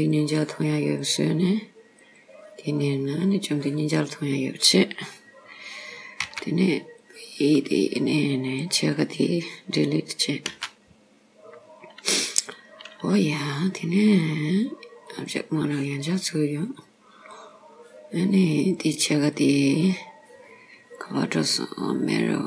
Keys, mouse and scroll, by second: 0.0 click, 1.0 click, 2.1 click, 4.1-5.2 scroll down 2, 6.3 b, 10.5 x, 14.2 click, 17.4 click, 18.6 click, 19.4 click, 22.2 click.